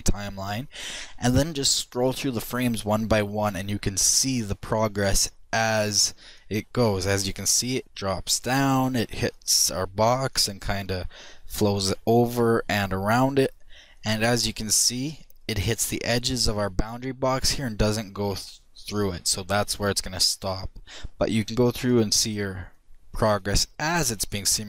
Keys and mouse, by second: 2.7-7.4 drag, 7.8-10.5 drag, 11.7-15.6 drag, 20.1-24.6 drag.